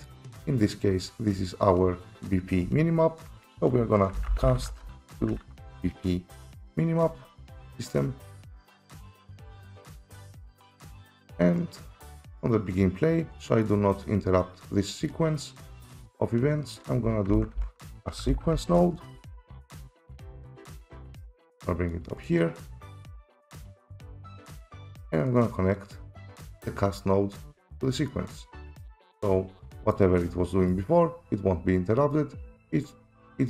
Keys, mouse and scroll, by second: 0.1 click, 1.2 click, 2.2 click, 4.2-5.6 typing, 8.6 click, 10.2 click, 13.6 right click, 15.1 right click, 16.8 click, 17.3-18.5 typing, 19.1 Return, 20.2 typing, 21.0 click, 21.9 click, 22.3 click, 22.8 right click, 23.4 click, 24.4 click, 24.8 click, 26.2 click, 27.0 click, 28.1 click, 29.0 right click, 29.9 right click, 30.7 right click, 32.1 right click.